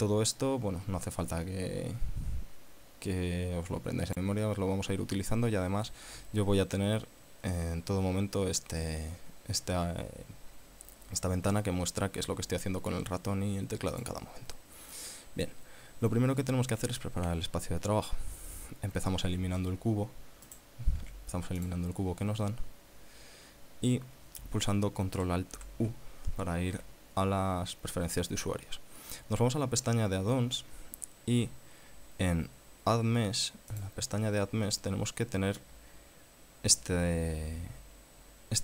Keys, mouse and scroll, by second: 6.3 Escape, 14.1 click, 19.5 x, 20.6 right click, 21.1 x, 21.8 click, 25.8 ctrl+alt+u, 33.9 click.